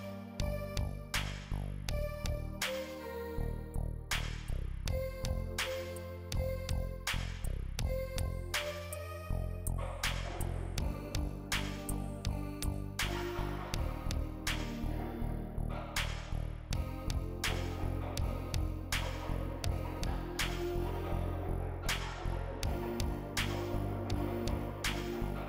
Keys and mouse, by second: 0.2 right drag, 0.8-3.3 typing, 1.2 click, 1.8 click, 2.1 right click, 2.5 shift+click, 2.7 click, 3.4 shift+click, 5.2 click, 5.2 a, 5.4 alt+g, 5.4 alt+r, 5.4 alt+s, 5.5 click, 5.8 click, 6.0 shift+click, 7.8 click, 8.7 shift+click, 9.3 drag, 9.6 a, 9.7 i, 9.8 shift+click, 11.6 drag, 11.8 alt+g, 11.8 alt+r, 11.8 alt+s, 12.0 click, 12.4 alt+g, 12.4 alt+r, 12.4 alt+s, 12.9 a, 13.0 i, 13.2 drag, 13.5 shift+click, 14.5 a, 14.6 i, 14.8 click, 15.0 alt+g, 15.0 alt+r, 15.0 alt+s, 15.1 click, 15.5 click, 16.7 shift+click, 17.4 shift+click, 18.2 shift+drag, 18.4 click, 18.9 shift+click, 19.3 drag, 20.2 a, 20.3 i, 20.5 shift+click, 21.5 click, 21.6 a, 21.6 alt+g, 21.7 alt+r, 21.7 alt+s, 21.9 click, 22.6 drag, 23.8 drag, 24.0 a, 24.2 i, 24.2-25.3 drag.